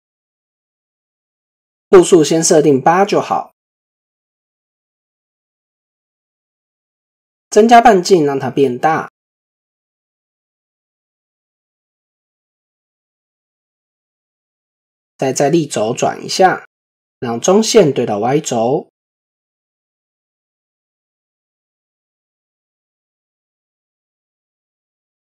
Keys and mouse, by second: 0.2 click, 0.8 click, 7.0-9.6 drag, 11.0-13.4 drag, 17.3-22.2 drag, 22.9-24.9 drag.